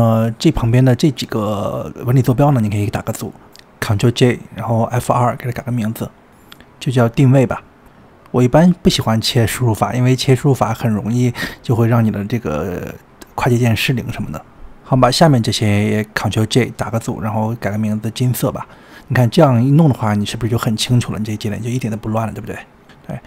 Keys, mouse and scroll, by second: 0.5 n, 0.8-1.2 scroll up 8, 1.2-1.7 scroll down 4, 1.7-2.3 shift+middle drag, 2.3 click, 3.2 click, 3.9 ctrl+j, 6.3 F2, 11.0-11.5 scroll down 3, 11.8 middle click, 12.3 click, 12.5-13.2 shift+middle drag, 13.2 click, 15.2 ctrl+j, 16.5 click, 18.3 F2, 21.8 click.